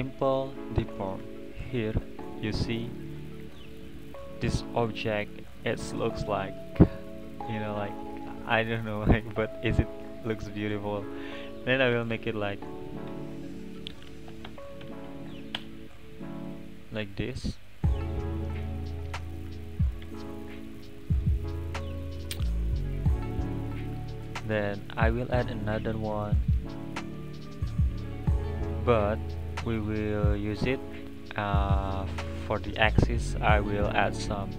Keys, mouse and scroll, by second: 2.1-4.4 middle drag, 4.4-5.0 scroll up 1, 8.2-12.1 drag, 12.1 BackSpace, 12.2 BackSpace, 14.0 BackSpace, 16.8-20.0 middle drag, 20.8 click, 21.1 click, 21.4-21.8 middle drag, 21.8 click, 22.3 click, 23.2 click, 25.2-28.0 drag, 28.0-31.3 scroll down 4.